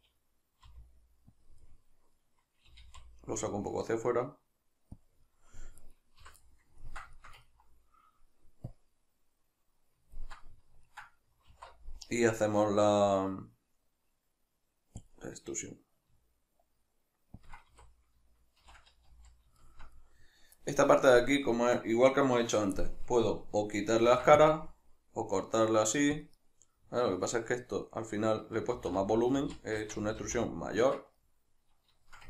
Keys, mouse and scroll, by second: 0.7 r, 1.5 click, 1.7-5.1 middle drag, 2.7 g, 5.1 click, 5.3-5.9 middle drag, 5.9 right click, 6.2 l, 6.5-8.7 middle drag, 8.7-10.2 drag, 10.2-17.5 ctrl+middle drag, 11.5 alt+e, 17.5 shift+click, 17.7 a, 18.7 shift+n, 19.1 z, 19.7-26.3 shift+middle drag, 26.3 click, 26.4-32.2 middle drag, 28.8 ctrl+z.